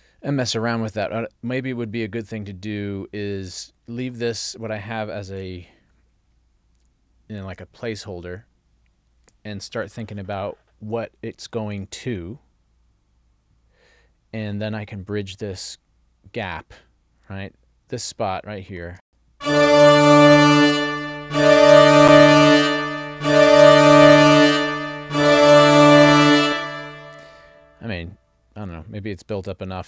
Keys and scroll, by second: 5.4 super+s, 19.1 space, 26.5 space.